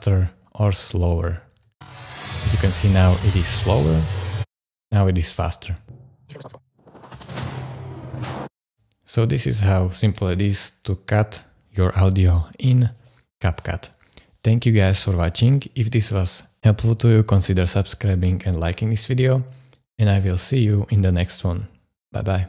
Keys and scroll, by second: 1.6 space, 5.7 space, 8.4 space.